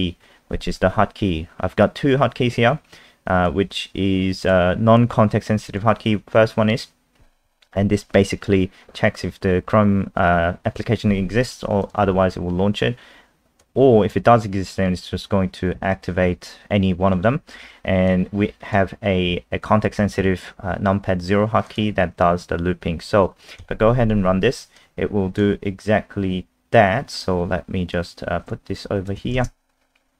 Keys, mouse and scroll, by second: 0.3 scroll down 1, 1.5 scroll up 1, 3.4 click, 19.2 scroll down 1, 21.7 click, 23.6 F5, 24.8 click, 29.3 ctrl+alt+space.